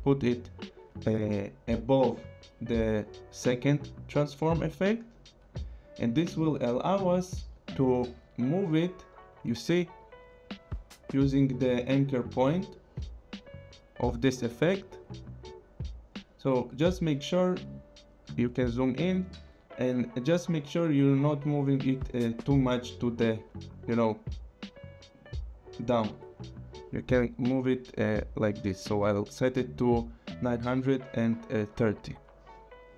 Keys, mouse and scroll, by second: 8.4 click, 17.5 scroll, 19.0 click, 19.3 click, 19.4 scroll, 19.7 click, 19.9 click, 21.8 click, 28.5 click, 30.8 Up.